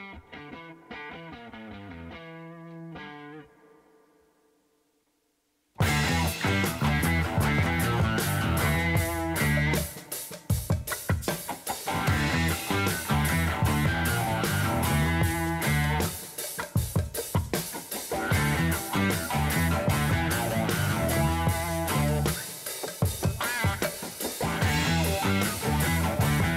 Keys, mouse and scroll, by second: 1.4 click, 2.1-9.7 drag, 11.0 click, 12.1 Tab, 13.1 p, 15.2-15.6 scroll up 3, 15.6 Tab, 16.2 click, 17.6-20.2 drag, 21.0-22.8 drag, 23.5-25.2 drag, 25.9-26.5 drag.